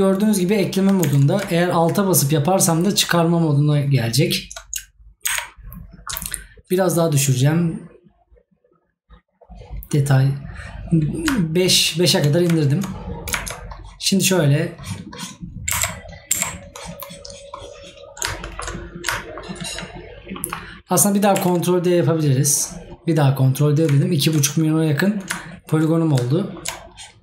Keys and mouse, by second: 6.0 right click, 11.7 right click, 18.5 right click, 26.4 right click.